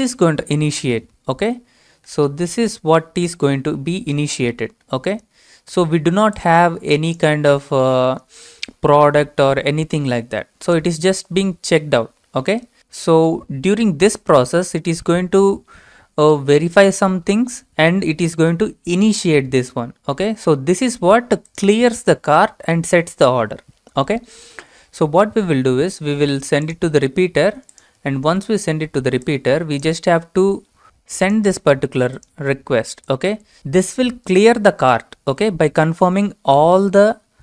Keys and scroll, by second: 0.0 alt+Tab, 24.6 alt+Tab.